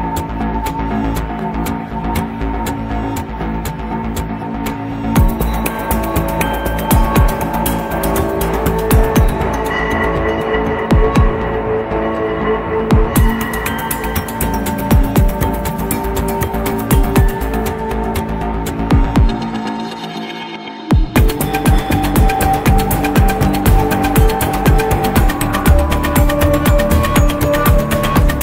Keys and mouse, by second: 1.0 middle click, 3.4 click, 4.4 middle click, 6.5 click, 7.4 click, 9.4 click, 10.6 middle click, 12.7 Delete, 14.0-15.1 drag, 17.0-17.4 middle drag, 18.8 click, 21.1 click, 22.9-24.0 drag, 25.5-28.4 drag.